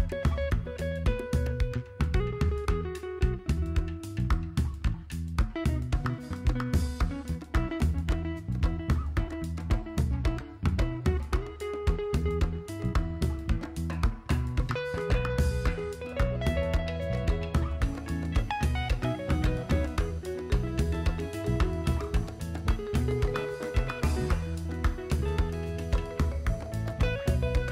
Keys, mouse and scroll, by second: 1.3-1.7 shift+middle drag, 2.0 click, 4.4 s, 6.6-7.8 drag, 9.2 KP_7, 11.2-12.5 drag, 13.7 super+click, 15.6-16.3 drag, 17.1 click, 18.5 super+click, 19.5 shift+click, 19.9 shift+click, 21.2-22.6 shift+drag, 22.9 click, 23.6-24.0 drag, 24.1 click, 24.5-25.9 drag, 26.8 `.